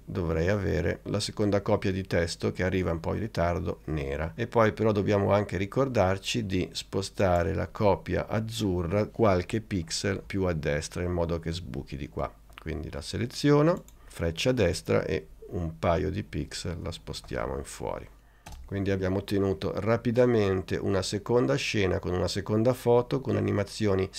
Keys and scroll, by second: 14.6 Right, 16.4 Right, 17.2 Left, 18.6 space.